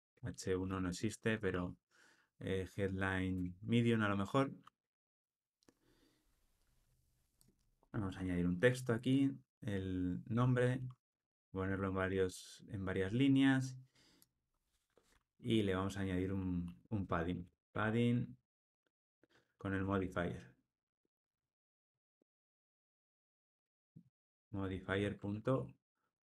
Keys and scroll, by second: 3.3 alt+shift+Left, 7.9 alt+Return, 21.6 Tab, 23.3 Tab, 24.9 alt+shift+Right.